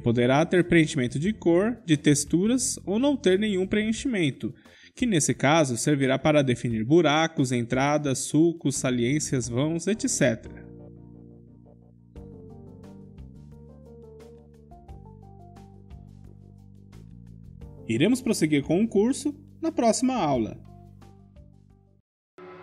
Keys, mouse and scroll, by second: 2.9-6.0 drag, 6.0-9.2 middle drag, 9.2 KP_5, 11.8-12.3 scroll up 1, 12.3-20.4 middle drag, 18.6 Tab.